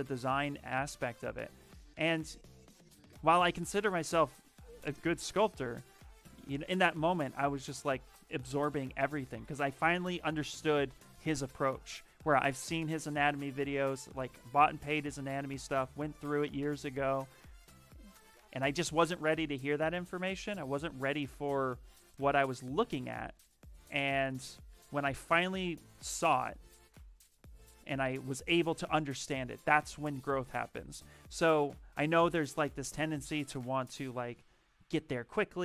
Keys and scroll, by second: 21.0 t, 26.8 s.